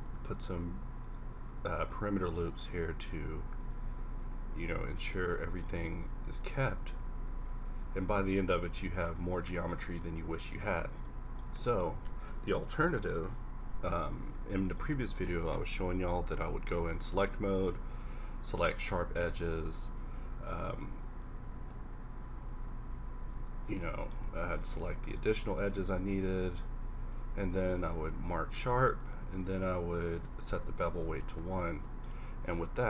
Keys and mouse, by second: 1.7 ctrl+r, 3.9 ctrl+r, 5.3 Tab, 5.9 Tab, 6.2 ctrl+r, 6.7 ctrl+r, 8.0 ctrl+r, 8.2 ctrl+r, 9.5-10.8 middle drag, 10.8 Tab, 14.1 Tab, 14.8 a, 23.5 middle click, 26.2 ctrl+`, 27.3 ctrl+e, 28.6 ctrl+e, 31.0 Tab.